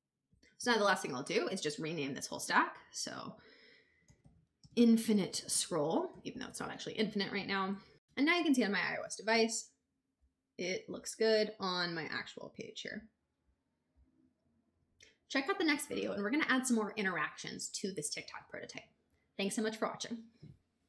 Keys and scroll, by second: 3.6-7.2 typing, 7.4 Return.